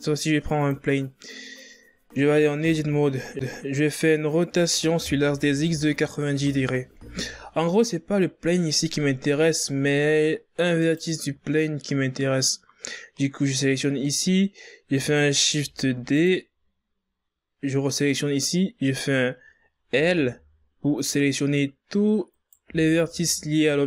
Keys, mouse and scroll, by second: 1.6-2.6 scroll up 3, 2.6 scroll up 1, 2.6 Tab, 4.2 r, 7.3-7.9 ctrl+scroll up 2, 10.5 right click, 15.3 shift+d, 18.0 right click, 19.7 l, 22.1 right click, 22.4 l.